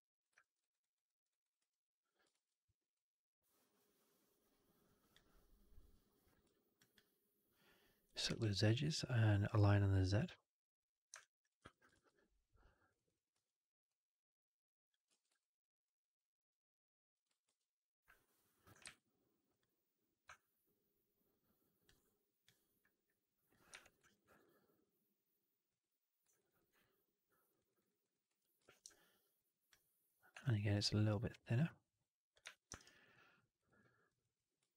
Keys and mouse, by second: 0.3 alt+middle drag, 0.5 alt+right click, 0.7 alt+right click, 0.9 alt+middle click, 1.2 alt+right click, 1.5 1, 2.2 shift+x, 2.8-5.0 drag, 6.6 ctrl+click, 8.3 alt+x, 11.0 alt+click, 11.5 2, 11.8 shift+x, 12.8 click, 12.9 click, 13.2 w, 13.7-14.8 drag, 15.0 ctrl+z, 15.3 alt+click, 17.3 shift+Tab, 18.7 alt+x, 20.2-21.7 alt+drag, 22.4 click, 23.6 4, 23.9 alt+right drag, 24.1 alt+right drag, 24.3-25.6 alt+drag, 26.2 right drag, 26.5 alt+right drag, 26.5 alt+4, 26.7-27.4 alt+drag, 27.5 alt+right click, 27.7 alt+right click, 27.9 alt+click, 28.2 1, 28.5 shift+x, 28.8 alt+click, 30.3 shift+x, 31.1-32.2 drag, 32.4 4, 32.6 alt+right drag, 32.8 alt+right drag, 33.0 alt+drag, 33.4 right drag, 33.7 middle drag, 34.1 click, 34.6 ctrl+s.